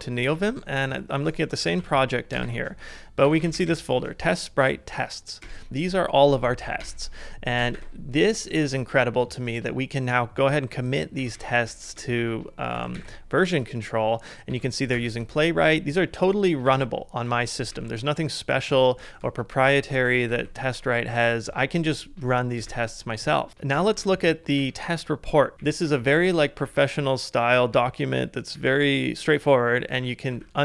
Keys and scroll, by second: 0.2 super+Tab, 1.6 ctrl+a, 2.3-3.7 typing, 5.4 Return, 5.4-6.2 typing, 6.8 Return, 7.6-9.0 typing, 10.9-14.2 typing, 14.5 ctrl+c, 16.1 ctrl+d, 16.7 ctrl+d, 17.3 ctrl+d, 19.6 ctrl+u, 19.8 ctrl+u, 20.0 ctrl+u, 22.7 e, 23.7-26.7 typing, 27.7-30.6 typing.